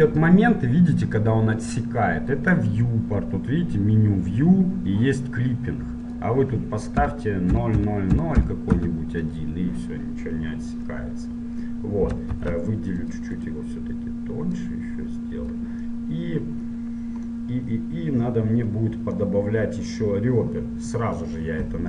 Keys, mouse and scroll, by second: 8.9 KP_0, 11.1 middle click, 13.3 ctrl+Tab, 13.5-15.6 right drag, 14.7-16.3 drag, 16.3 middle click, 16.3 click, 16.5-21.8 middle drag.